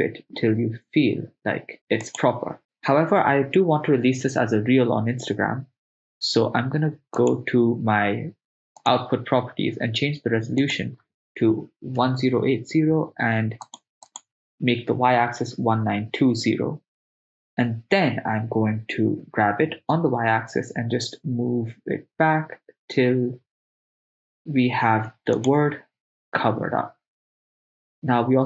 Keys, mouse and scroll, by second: 2.1-3.2 drag, 7.2 click, 8.8-13.7 drag, 14.1-16.5 drag, 19.2 g, 20.0 y, 25.4-27.1 drag.